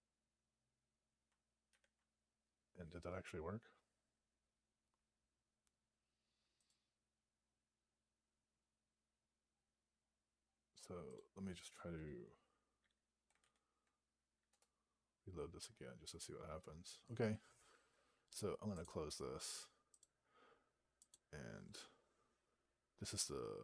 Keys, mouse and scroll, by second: 6.5 click, 6.9-8.4 scroll up 11, 9.4-11.0 scroll down 14, 11.0 click, 13.3 alt+p, 14.4 Return, 19.9 Return.